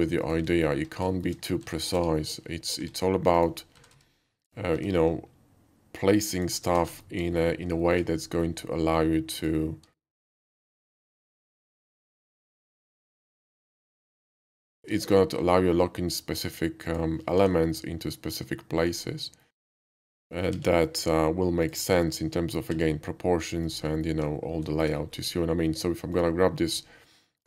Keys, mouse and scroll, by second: 0.2 click, 0.5 alt+middle click, 1.1 shift+middle click, 1.6-4.8 typing, 3.4 click, 6.3 click, 6.9 alt+middle click, 7.1-7.6 alt+middle drag, 7.8 shift+middle click, 9.3 shift+click, 9.9 shift+middle click, 10.4 shift+d, 11.2 click, 11.8 r, 12.0 z, 12.6 9, 12.7 0, 13.0 Return, 14.9 shift+middle click, 15.3 s, 16.9 click, 17.3 g, 18.8 click, 19.0-19.4 middle drag, 20.6 x, 21.6 click, 22.0 s, 22.7 x, 23.7 click, 23.9 alt+middle click, 24.8 shift+middle click, 25.0 shift+middle click, 25.1 shift+middle click, 26.1 shift+click.